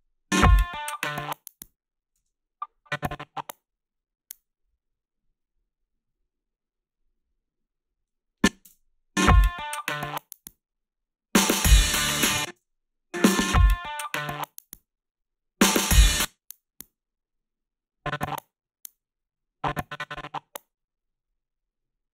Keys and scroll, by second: 2.2 space, 8.7 space, 12.1 space, 12.5 space, 16.0 space.